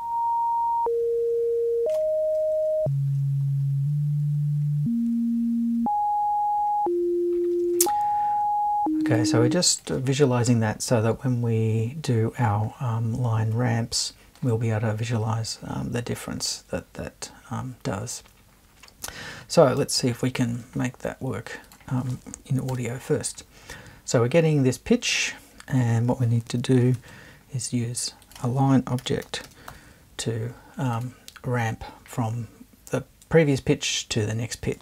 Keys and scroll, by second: 22.7 BackSpace, 26.9 super+1, 29.0 l, 29.4 n.